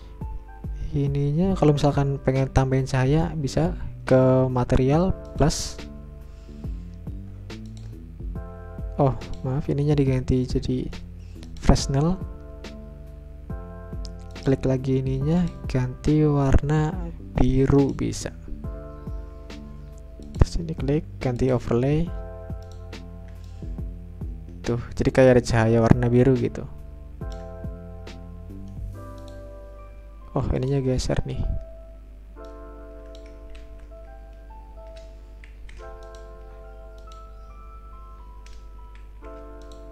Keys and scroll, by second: 34.0 ctrl+z, 35.5 ctrl+shift+g, 39.1 ctrl+shift+g.